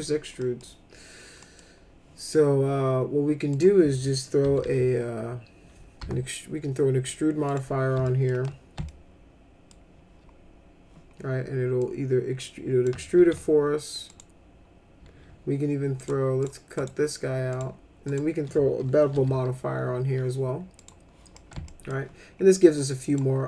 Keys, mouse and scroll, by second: 0.4 middle click, 1.4 middle click, 3.5 click, 4.4 s, 4.6 s, 6.0 e, 7.5 click, 8.0 alt+middle click, 8.8 alt+middle click, 11.8-12.8 drag, 13.1 ctrl+z, 14.1 click, 15.9 click, 16.4 click, 16.7 right click, 17.5 click, 18.1 click, 19.1 b, 20.7 click, 21.3 middle click, 21.6 alt+middle click, 22.7 click.